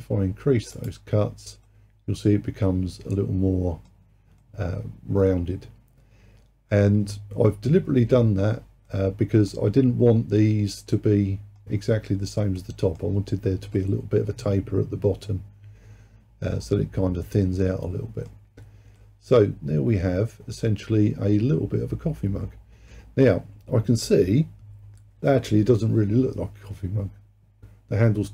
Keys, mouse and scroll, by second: 1.7-16.8 middle drag, 18.4-19.0 scroll down 3, 19.0-22.1 middle drag.